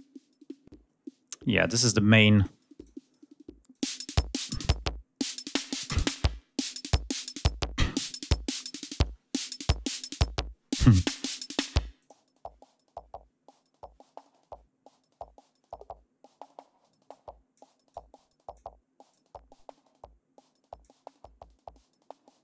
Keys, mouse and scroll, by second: 2.2 click, 2.6 click, 3.5 click, 4.2 click, 5.0 click, 11.8 click, 16.9-17.6 drag, 17.7-18.6 drag, 18.9-20.8 drag.